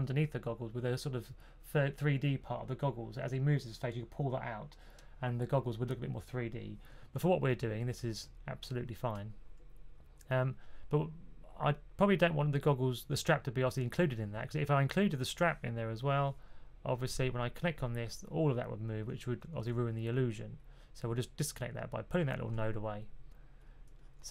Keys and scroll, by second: 6.9 super+z, 7.3 super+z, 7.8 super+z, 19.4 super+z.